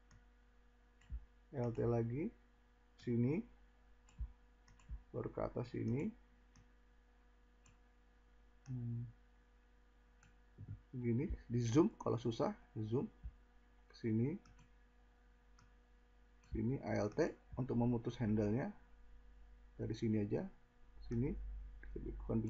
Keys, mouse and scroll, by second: 11.4 scroll.